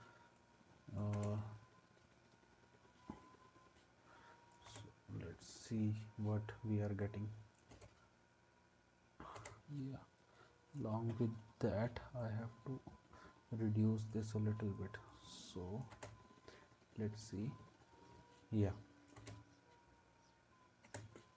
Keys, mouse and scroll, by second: 1.1 space, 4.7 space, 7.7 space, 9.4 space, 15.9 space, 19.2 space, 20.9 space.